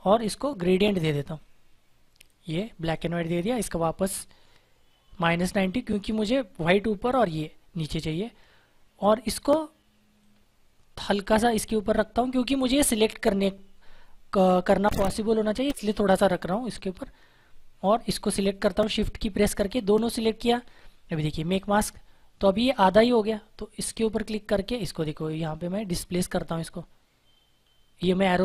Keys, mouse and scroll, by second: 1.2 click, 7.9 click, 10.1 click, 17.8 shift+Num_Lock, 18.6 click, 21.4 click, 23.8 click, 25.6 Left.